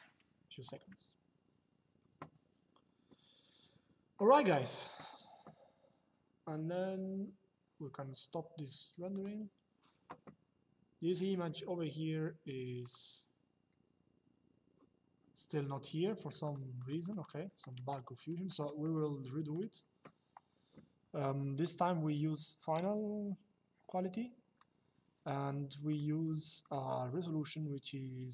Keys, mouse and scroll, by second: 8.9 click, 12.5 click, 16.1 click, 17.6 shift+middle click, 21.3 click, 25.6 click.